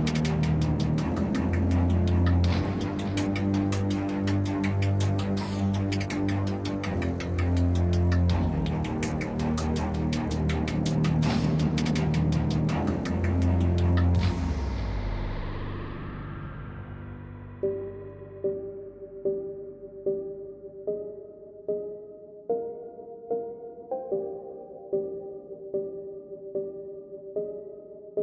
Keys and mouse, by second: 0.1 ctrl+x, 1.4 ctrl+x, 2.2 ctrl+x, 2.4 Tab, 2.7 Tab, 3.8 drag, 4.1 ctrl+x, 4.7 ctrl+b, 5.9 Tab, 6.4 Tab, 7.3 ctrl+x, 7.9 ctrl+b, 10.0 Tab, 11.1 KP_Divide, 11.3 z, 11.4 z, 11.5 a, 11.7 middle click, 12.2 Tab, 12.7 KP_Decimal, 14.3 ctrl+x, 14.9 ctrl+x, 16.7 ctrl+x, 17.6 g, 18.6 Tab, 19.3 Tab, 19.8 ctrl+x, 20.5 ctrl+x, 21.0 KP_Decimal, 21.6 Tab, 21.7 Tab, 22.0 ctrl+r, 22.9 ctrl+r, 24.2 ctrl+r, 25.3 right click, 25.5 ctrl+x, 26.4 ctrl+Tab, 26.6 click, 27.0 j, 27.5 a, 27.6 a, 27.7 w, 27.8 Tab.